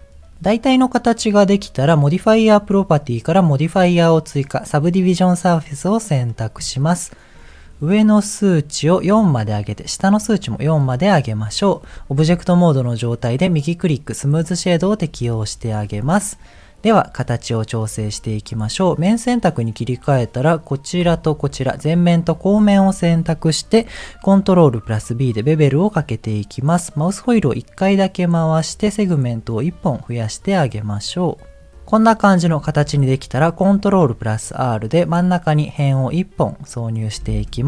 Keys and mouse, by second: 0.6 middle click, 7.3 click, 7.6 click, 8.5 click, 10.7 click, 12.1 Tab, 13.3-14.4 right drag, 15.0 Tab, 17.2 middle click, 19.0 click, 20.5 middle click, 21.2 click, 21.5 middle click, 23.1 middle click, 24.5 ctrl+b, 31.7-32.8 middle drag, 33.6 ctrl+r, 36.3 middle click.